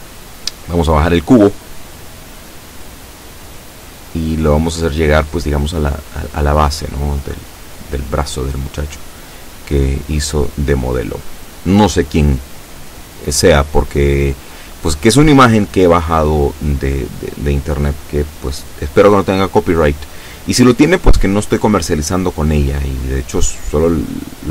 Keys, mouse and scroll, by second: 7.3-11.3 drag.